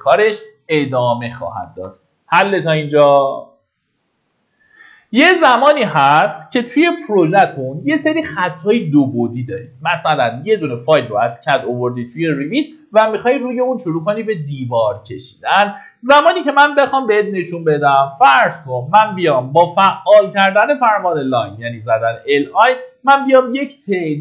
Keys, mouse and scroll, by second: 1.0 Escape, 1.9-2.3 scroll down 1, 18.0 l, 19.4-20.2 typing, 22.0-22.4 scroll up 1, 22.8 click.